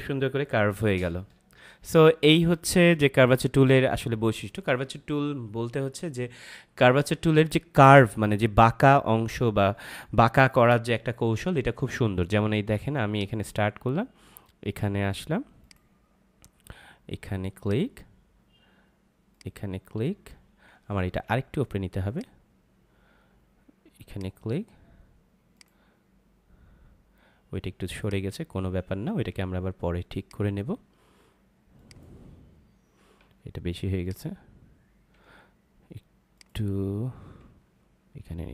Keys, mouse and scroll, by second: 13.1 click, 21.0 ctrl+z, 22.0 click, 33.2 ctrl+z, 34.0 click, 35.3 z, 36.3 click, 37.5 ctrl+z.